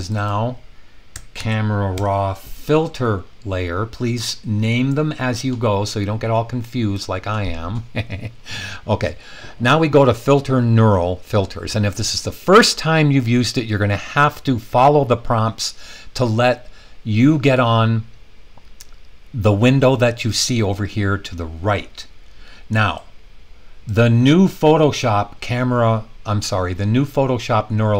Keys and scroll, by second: 1.3 super+v, 1.9 Return.